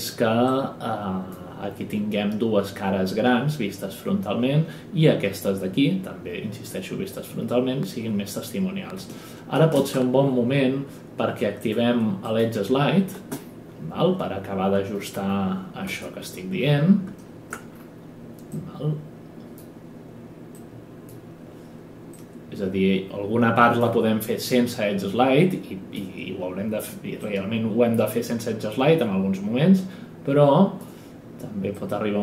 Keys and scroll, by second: 9.6 ctrl+space, 13.1 space, 15.8 space.